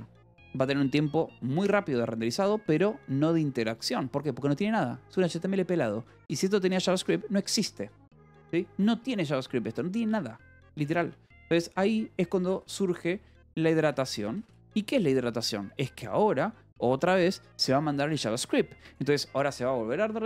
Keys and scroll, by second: 9.2 =, 11.2-14.7 typing.